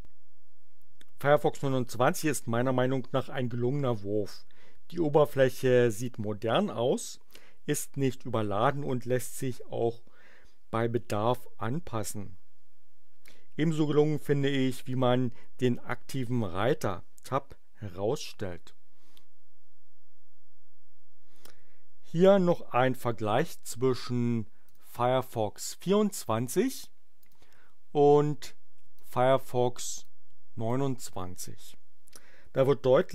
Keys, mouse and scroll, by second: 24.6 click, 27.2 click, 28.9 click, 30.0 click.